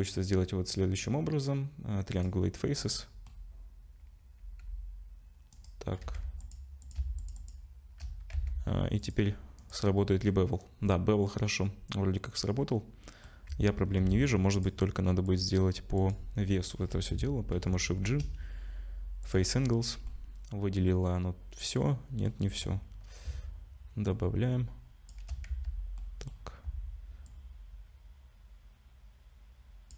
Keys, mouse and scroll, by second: 2.9 middle click, 4.4 ctrl+b, 6.0 2, 6.4 click, 6.8 click, 7.2 alt+shift+click, 7.3 alt+shift+click, 7.4 click, 8.3 Tab, 9.0 click, 10.3 middle click, 13.5 Tab, 14.0 2, 14.5 click, 15.3 click, 17.6 shift+g, 20.1 middle click, 24.1 shift+click, 25.5 z, 26.0 middle click, 27.3 shift+click.